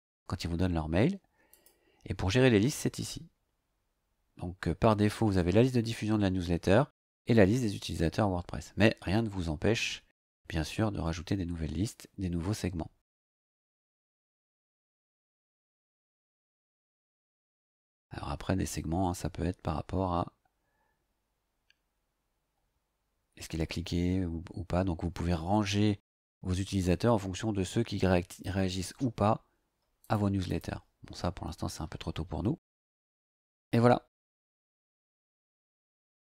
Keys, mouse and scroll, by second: 1.5 click, 14.0 click, 18.7 scroll up 2, 30.0 click, 30.5 click.